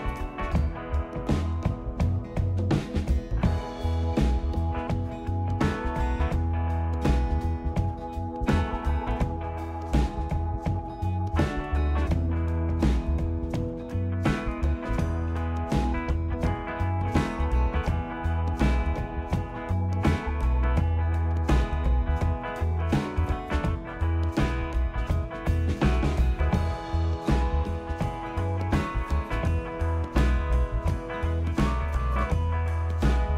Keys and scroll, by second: 6.1 ctrl+g, 18.8 =, 19.0 =, 28.8 -, 28.9 space.